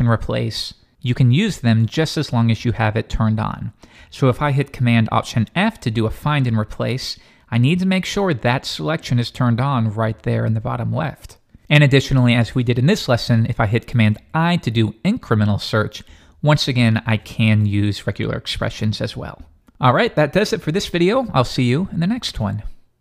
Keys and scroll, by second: 5.3 alt+super+f, 14.2 super+i.